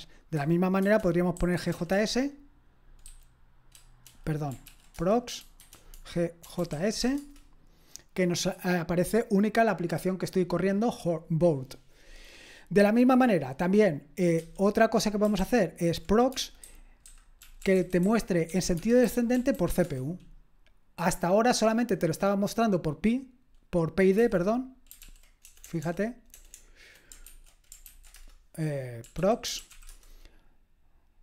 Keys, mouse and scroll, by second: 0.8-3.5 typing, 4.7 ctrl+p, 4.7-7.5 typing, 12.8-14.0 scroll down 1, 14.0-14.4 scroll down 1, 14.4 q, 15.4 ctrl+p, 16.3-20.0 typing, 24.2 q, 25.0 ctrl+p, 25.4-26.5 typing.